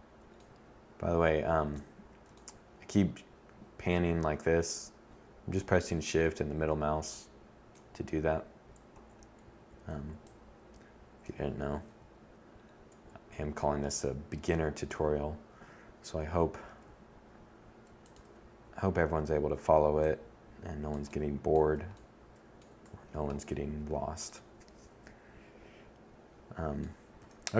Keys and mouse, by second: 2.6-4.5 middle drag, 7.3 Tab, 7.9 Tab, 8.2 Tab, 10.2 7, 11.6 1, 13.2 z, 15.1 s, 16.5 1, 17.4 z, 19.6 middle click, 19.9 z, 21.0 Tab, 22.7 middle click, 25.5 7.